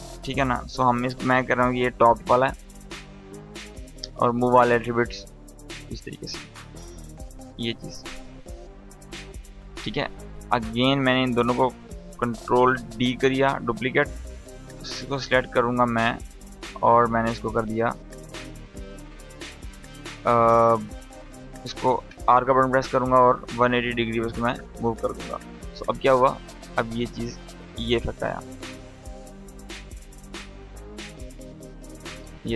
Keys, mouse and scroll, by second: 0.1 BackSpace, 2.0-2.8 typing, 3.8-9.0 drag, 10.8 shift+click, 12.5 ctrl+d, 13.4 click, 19.9 click, 21.6 r, 22.8 click, 25.3-27.5 drag, 27.5 space, 30.2 click, 32.3 space.